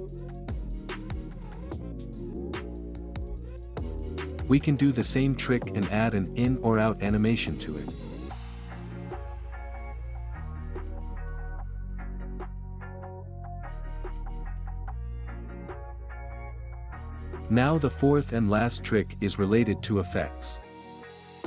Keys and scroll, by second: 2.4 space, 7.8 ctrl+z, 11.1 space, 16.0 space.